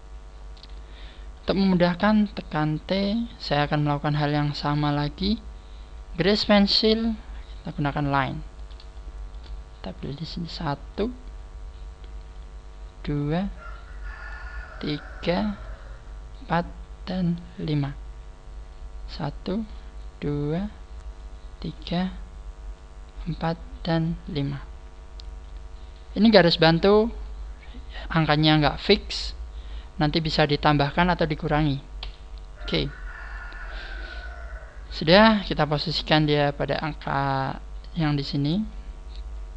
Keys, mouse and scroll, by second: 0.2-1.2 scroll down 11, 2.1 t, 3.0-3.4 scroll down 3, 4.0 scroll down 1, 6.6 scroll down 13, 8.0 scroll up 1, 8.9 shift+middle click, 8.9 scroll up 2, 35.0 scroll up 4, 35.8 click.